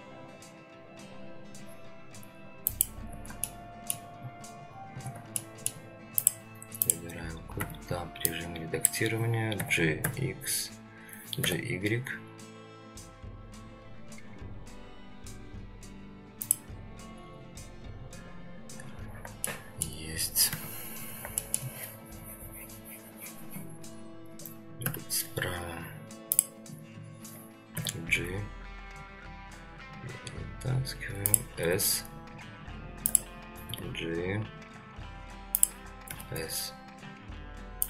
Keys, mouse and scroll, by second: 3.5-3.9 shift+middle drag, 5.4-5.7 shift+middle drag, 6.2-7.6 drag, 7.6 Tab, 8.3-9.6 drag, 9.6 g, 19.4 shift+middle click, 20.5 Tab, 20.8 scroll down 2, 21.4 shift+middle click, 24.8 ctrl+KP_3, 26.3 click, 27.7 g, 31.6 s, 33.7 g, 36.1 s.